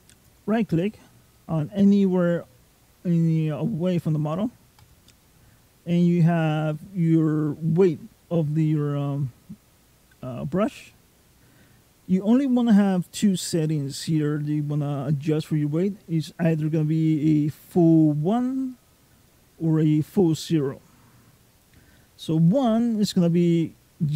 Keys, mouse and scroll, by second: 0.1 right click, 4.6 right click.